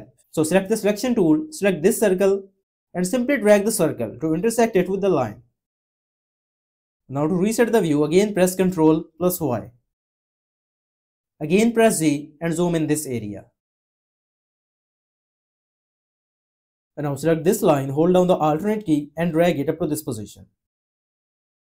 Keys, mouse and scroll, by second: 8.4 y, 11.6 z, 18.4 alt+click.